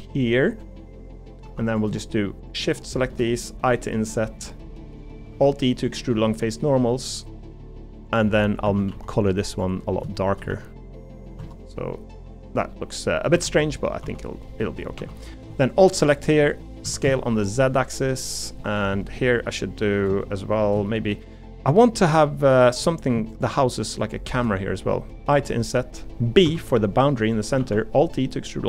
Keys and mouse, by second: 1.4 3, 3.6 i, 5.3 alt+e, 8.6 a, 8.9 g, 10.2 shift+middle click, 10.5 g, 11.4 Tab, 12.1 middle click, 13.3 Tab, 13.5 middle click, 14.0 3, 14.5 middle click, 15.0 3, 16.8 s, 18.6 middle click, 19.1 middle click, 20.0 shift+middle click, 20.9 shift+middle click, 21.2 middle click, 22.1 middle click, 22.8 middle click, 24.4 middle click, 27.6 alt+e.